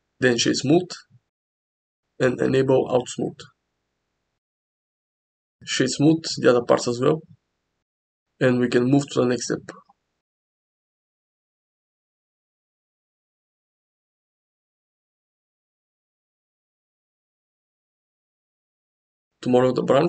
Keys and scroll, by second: 18.5 shift+a.